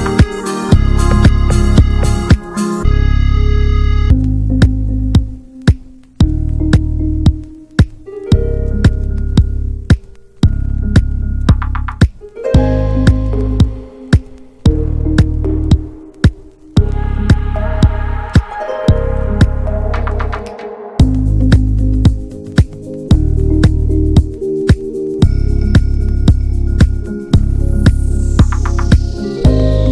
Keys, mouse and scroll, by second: 1.5 ctrl+s, 1.7 click, 2.0 /, 2.3-2.6 middle drag, 2.6 Tab, 2.8-3.6 middle drag, 3.6 2, 3.7 click, 4.2 alt+shift+drag, 4.5 alt+shift+click, 4.8 alt+shift+click, 5.1 middle click, 5.6 alt+shift+click, 5.9 alt+shift+click, 6.2 middle click, 6.7 alt+shift+click, 7.2 alt+shift+click, 7.7 alt+shift+click, 8.0 shift+middle click, 8.5-8.9 scroll up 1, 8.9 alt+shift+click, 9.3 alt+shift+click, 9.6 alt+shift+click, 10.2 alt+shift+click, 10.5 shift+middle click, 11.0 alt+shift+click, 11.3 middle click, 11.5-12.5 scroll up 3, 11.7 shift+middle click, 12.5 ctrl+b, 14.4 scroll down 2, 14.6 middle click, 15.0 Tab, 15.2 scroll down 1, 15.4 shift+middle drag, 15.6 click, 15.8 ctrl+a, 16.1 middle click, 16.3 ctrl+s, 16.8 /, 17.2 click, 17.5 click, 18.5 ctrl+j, 18.8 click, 19.2-21.8 middle drag, 21.8 ctrl+s, 22.1 click, 22.4 ctrl+a, 22.9 click, 23.1-24.7 shift+middle drag, 25.0 alt+middle click, 25.4 ctrl+s, 25.6 click, 25.9 Tab, 26.3 click, 26.8 l, 27.1 middle click, 27.3-27.8 scroll up 1, 27.8 l, 28.3 alt+middle click, 28.5 alt+middle click, 29.1 ctrl+s, 29.3 shift+middle click, 29.7 r.